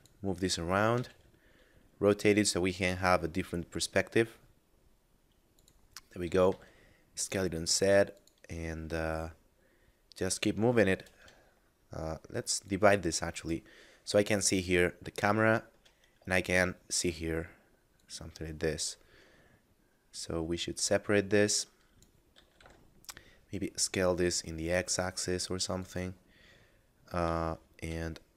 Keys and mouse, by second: 0.9 r, 1.0 z, 5.5 click, 6.1 s, 8.1 click, 10.9 shift+space, 12.7 click, 13.8 middle click, 14.5 ctrl+middle click, 16.1 middle click, 16.4 shift+middle click, 17.9 click, 22.2 s, 22.6 x, 25.8 click, 27.4 shift+middle click.